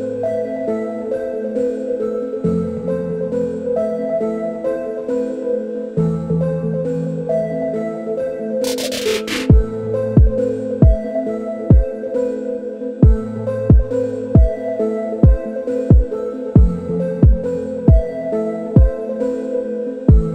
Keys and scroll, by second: 6.5 typing, 7.4 Return, 11.4-20.3 typing.